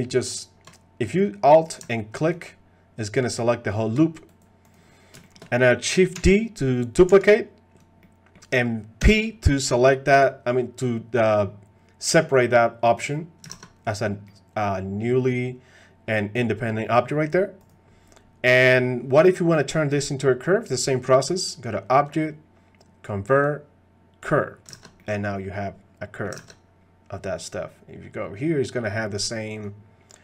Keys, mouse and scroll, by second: 0.3 alt+click, 2.3 alt+click, 2.9 alt+click, 3.7 alt+click, 5.2 shift+middle click, 6.2 shift+d, 8.0 click, 9.0 p, 13.6 ctrl+Tab, 13.9 click, 14.2-16.8 middle drag, 20.9 middle click, 22.0-24.3 drag, 24.8 ctrl+Tab, 25.0-26.2 middle drag, 26.5 ctrl+Tab, 29.2 click, 29.5 click.